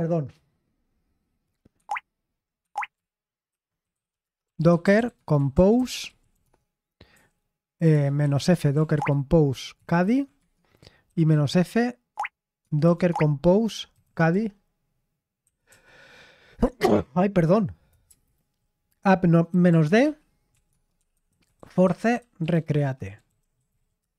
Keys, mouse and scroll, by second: 1.7 Escape, 2.5 Escape, 3.2-10.0 typing, 11.0 typing, 12.1-14.0 typing, 15.4 typing, 18.2 typing, 19.4-24.1 typing.